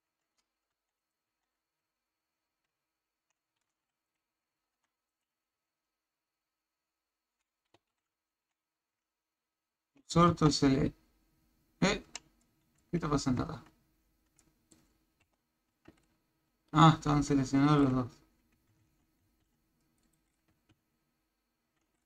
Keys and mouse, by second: 0.7 Tab, 1.0 click, 1.3 Tab, 2.4 shift+s, 4.1 click, 4.7 Tab, 5.1 click, 5.7 shift+s, 8.3 Tab, 9.1 shift+s, 10.3 Tab, 12.1 a, 12.4-12.9 middle drag, 13.5 shift+z, 14.4-14.7 middle drag, 15.2 KP_1, 15.7 Tab, 18.8 shift+z, 19.4 c, 20.7 shift+s.